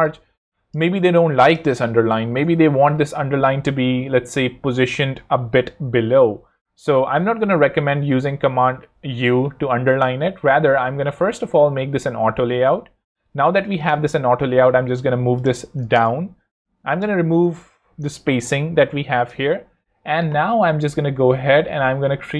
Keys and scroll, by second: 1.5-2.8 typing, 7.4 super+u, 11.4 shift+a, 15.8 0, 15.9 Home, 18.0 0, 19.1 Return, 21.9 a.